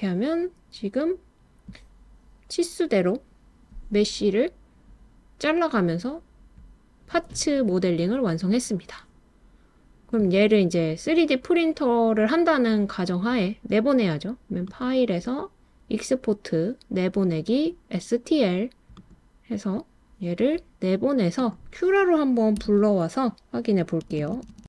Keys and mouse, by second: 14.7-19.6 drag.